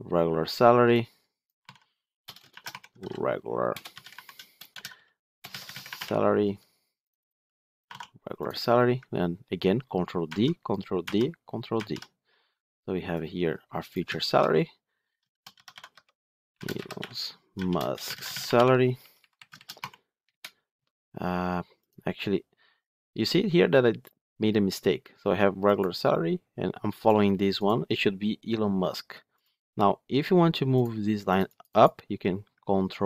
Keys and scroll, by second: 10.2 ctrl+d, 19.5 ctrl+shift+Right, 24.1 Return.